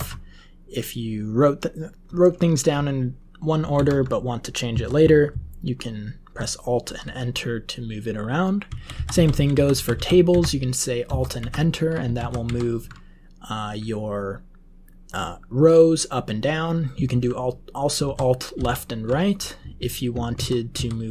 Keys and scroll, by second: 3.7 alt+Up, 4.7 Down, 5.0 Down, 5.2-6.5 Down, 6.8 Up, 8.6 Left, 8.9 Left, 9.1 Left, 9.3 Left, 9.5 Left, 9.7 Left, 9.9 Left, 10.2 alt+Up, 11.0 alt+Down, 11.3 alt+Up, 12.1 alt+Down, 17.9 alt+Up, 20.3 alt+Right, 20.7 alt+Left.